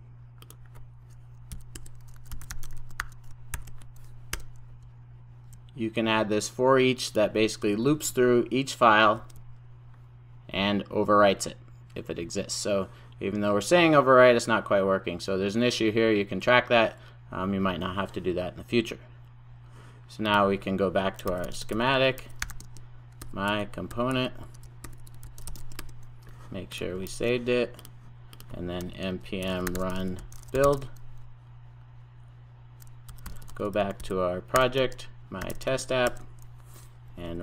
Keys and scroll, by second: 3.6 super+j, 4.3 Return, 8.3 alt+Return, 27.1 super+s.